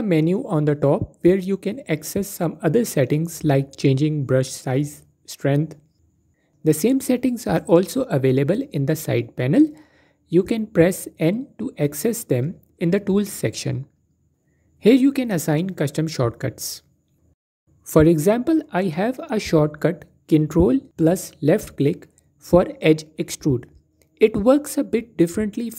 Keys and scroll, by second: 9.6 n.